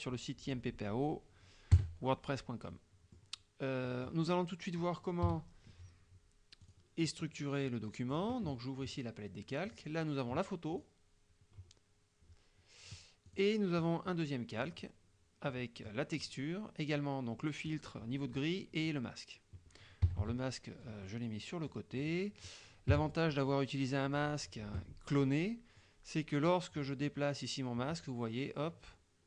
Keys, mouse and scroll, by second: 1.8 KP_Subtract, 2.8 click, 3.9 click, 5.3 KP_5, 6.7 click, 8.2 click, 9.8 click, 10.8 click, 13.3 click, 14.7 click, 15.5 middle click, 20.3 KP_Subtract, 21.1 click, 22.1 click, 23.0 KP_Subtract, 26.5-29.2 drag.